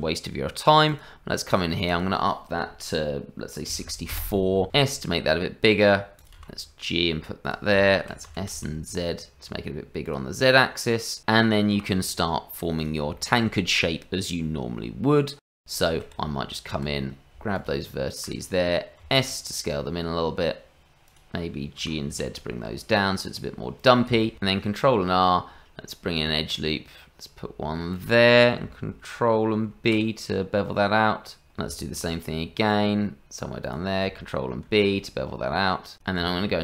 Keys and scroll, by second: 4.7 s, 6.4 g, 8.3 s, 11.7 g, 16.2 Tab, 19.0 s, 21.8 g, 24.7 ctrl+r, 29.6 ctrl+b, 31.9 ctrl+r, 34.1 ctrl+b, 36.2 Tab.